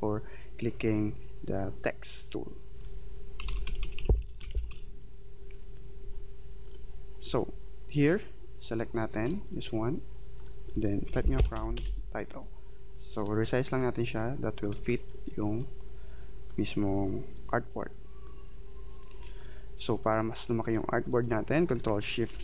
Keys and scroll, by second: 3.4-4.7 typing, 11.8 Return.